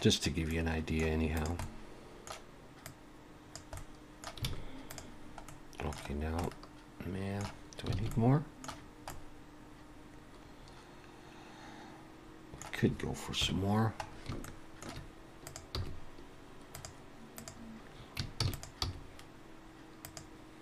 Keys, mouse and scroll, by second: 0.4 scroll up 1, 0.5 middle click, 1.4 click, 1.6 middle click, 2.9 click, 3.8 middle click, 4.5 alt+a, 4.9 click, 5.5 middle click, 6.1 scroll down 1, 6.5 middle click, 8.0 alt+a, 8.1 middle click, 9.1 middle click, 13.4 KP_1, 14.1 scroll up 3, 14.4 shift+middle click, 15.5 click, 15.8 g, 17.4 click, 18.5 shift+d, 18.8 g.